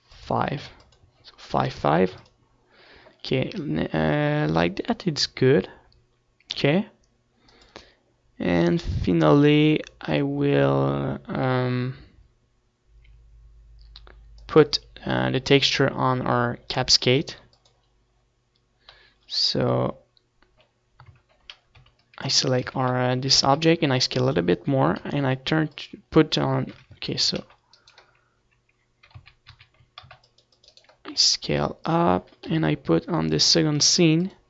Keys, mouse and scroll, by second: 0.1 ctrl+s, 2.4-4.1 drag, 4.3 ctrl+s, 9.6-11.0 drag, 17.7 ctrl+s, 19.7-21.5 drag, 21.9 KP_7, 23.3 shift+a, 23.9 c, 24.7-26.7 right drag, 24.8 z, 25.6 s, 26.5-28.2 drag, 27.1 m, 29.1 ctrl+z, 29.5 c, 30.1 right click, 31.4 ctrl+z, 31.7 ctrl+z, 32.2 c, 32.9-34.4 right drag, 33.3 s, 34.1-34.4 drag.